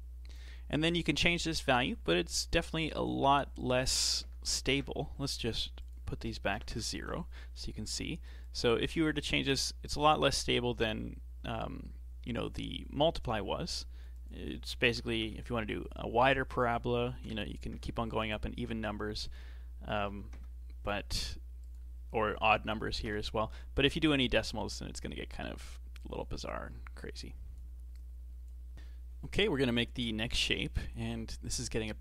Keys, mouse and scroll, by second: 14.1-24.1 drag, 24.7-27.7 drag, 27.9 click, 28.7-30.7 shift+middle drag.